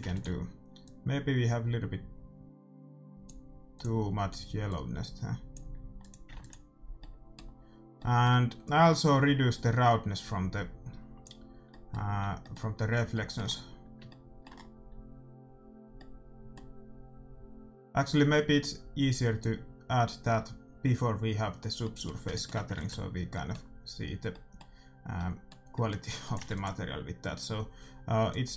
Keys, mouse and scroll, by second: 0.0 ctrl+s, 3.7-5.6 drag, 6.0-7.7 drag, 6.3 ctrl+s, 6.9-8.9 middle drag, 8.9-10.7 drag, 11.6-13.6 middle drag, 16.6-18.0 middle drag, 18.7-20.3 drag, 21.7 middle click, 22.7 ctrl+s, 26.3-28.0 drag, 26.5 ctrl+s, 28.2-28.5 drag.